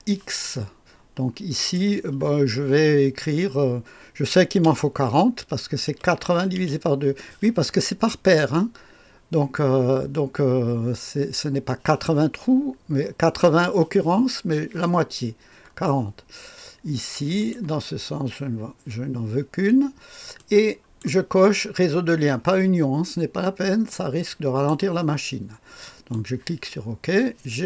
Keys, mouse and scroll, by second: 1.5 click, 4.6 BackSpace, 5.8 KP_4, 6.5 KP_0, 17.3 click, 18.0-18.6 scroll down 1, 20.3-21.4 drag, 23.8 click, 25.8 click, 26.7-27.6 scroll down 2.